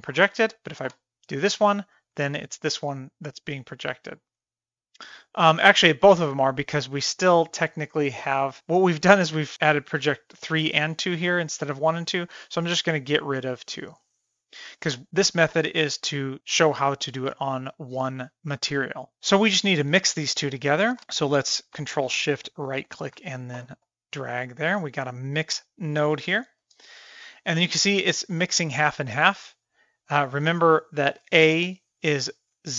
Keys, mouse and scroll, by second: 0.7 ctrl+shift+click, 2.1 click, 2.3 g, 4.8-5.6 middle drag, 7.5 click, 13.1 click, 14.0 click, 15.6 shift+middle click, 17.1 middle click, 17.6 shift+middle click, 18.1 middle click, 22.1-23.0 ctrl+shift+right drag, 24.2 click, 25.0 click, 26.3 click, 26.9 shift+middle click, 27.9 shift+middle drag, 28.3 middle drag, 28.7 shift+middle click, 29.1 middle click, 32.3 click.